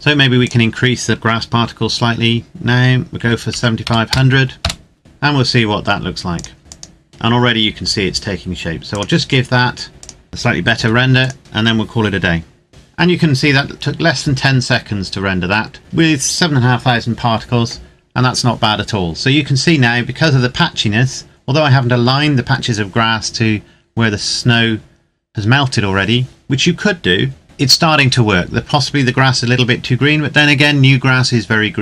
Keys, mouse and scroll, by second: 0.4 click, 3.2 KP_7, 3.5 KP_5, 3.8 KP_0, 4.6 KP_Enter, 5.0 click, 6.6 click, 9.9 click, 10.9 ctrl+s, 11.4 click, 15.0-15.8 scroll up 1, 15.8-16.8 scroll down 1.